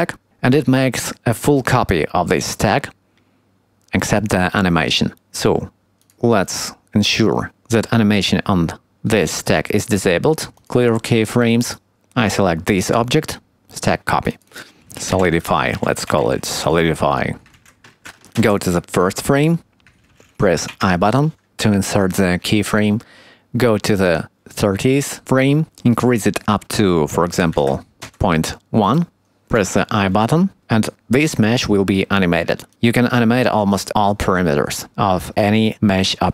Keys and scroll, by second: 15.2 BackSpace, 18.3 shift+Left, 20.7 i.